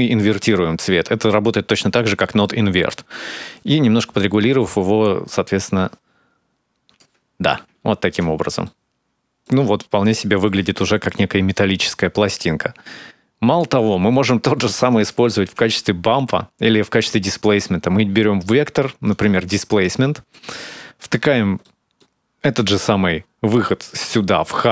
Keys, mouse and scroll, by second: 1.8-2.2 scroll down 2, 2.2 middle click, 3.0-3.8 scroll up 1, 3.8 scroll up 1, 3.9 shift+click, 7.0-7.4 scroll down 4, 8.1-8.7 scroll down 2, 8.4 middle click, 9.3-9.8 scroll up 4, 10.0 middle click, 11.3 click, 13.7 scroll down 2, 13.9 middle click, 14.7 click, 15.1 shift+a, 19.8 middle click, 21.4 middle click, 22.4 click.